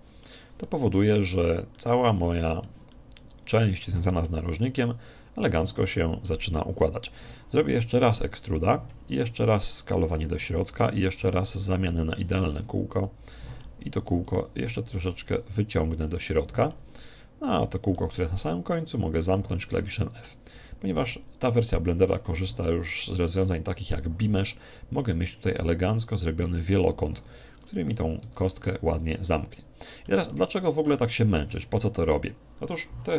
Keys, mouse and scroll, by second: 1.4 z, 2.9-4.6 middle drag, 4.8 middle click, 5.0-6.6 middle drag, 8.0 e, 8.5 click, 8.9 s, 11.1 click, 11.5 alt+shift+s, 12.3 click, 12.5-14.2 middle drag, 14.3 click, 16.2-17.9 middle drag, 19.5 middle click, 20.5-21.5 middle drag, 20.6 a, 21.7-23.1 middle drag, 23.3-24.9 middle drag, 27.5-28.3 scroll down 1, 28.3 Tab, 28.3-28.7 scroll down 1, 28.7-32.0 middle drag.